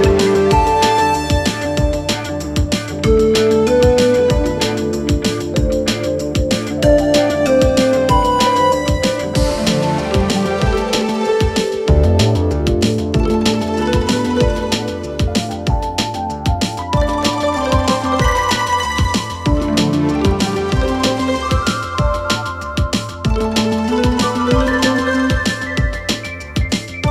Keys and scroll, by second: 3.4 s, 12.7 ctrl+c, 16.9 ctrl+v.